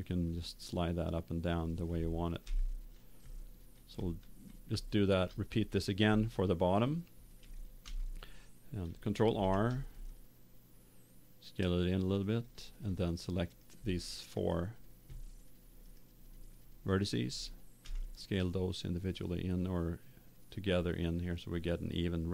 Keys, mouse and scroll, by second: 0.2 click, 2.9 middle click, 3.3-4.4 middle drag, 4.8 middle click, 5.3 middle click, 6.3 middle click, 7.8 a, 9.3 ctrl+r, 12.5 click, 13.4 middle click, 14.4-18.8 right drag, 17.8 s.